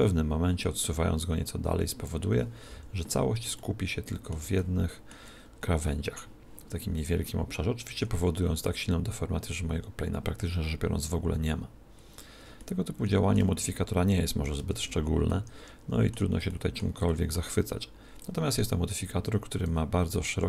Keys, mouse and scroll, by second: 2.7 z, 3.6-6.9 middle drag, 6.9 scroll down 1, 7.2-8.8 middle drag, 9.2 click, 12.6-14.6 middle drag, 14.6 alt+g, 15.3-19.0 middle drag, 18.2 click.